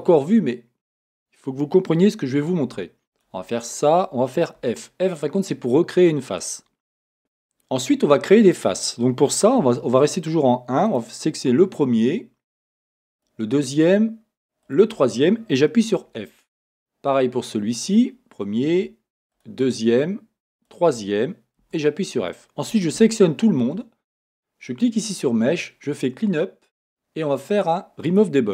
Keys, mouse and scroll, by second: 3.1 shift+click, 4.7 f, 7.2-10.9 middle drag, 7.2 a, 9.6 1, 10.9 click, 13.1 shift+click, 14.6 shift+click, 15.8 f, 17.8 click, 19.3 shift+click, 20.5 shift+click, 21.6 f, 22.7 a, 24.7-28.5 drag.